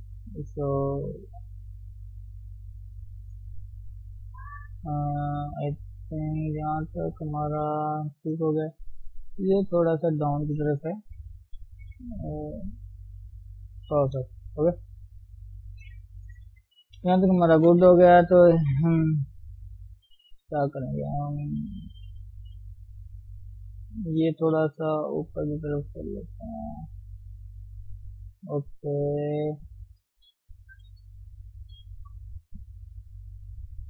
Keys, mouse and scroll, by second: 0.3 click, 0.8 g, 2.1 click, 2.4 g, 3.7 click, 3.9 g, 4.7 scroll down 1, 5.0-8.0 middle drag, 8.4 KP_1, 8.6-9.4 scroll up 1, 9.4 scroll up 2, 9.6 click, 11.0 g, 13.7 scroll down 1, 14.0 shift+middle click, 14.4 Tab, 14.5 scroll down 1, 14.8-15.4 scroll up 1, 15.4 scroll down 1, 15.5 middle click, 16.0 scroll up 2, 16.2 middle click, 16.6-17.0 scroll down 2, 17.0 KP_3, 17.2 scroll up 1, 17.4 scroll down 1, 17.5 shift+middle click, 17.7-18.3 scroll up 2, 18.5 click, 19.3-21.0 shift+middle drag, 21.0 scroll up 1, 21.5 scroll down 1, 21.7-24.0 shift+middle drag, 24.0 click, 24.6 g, 28.8 KP_1, 30.0 click, 30.7 g, 33.5 click.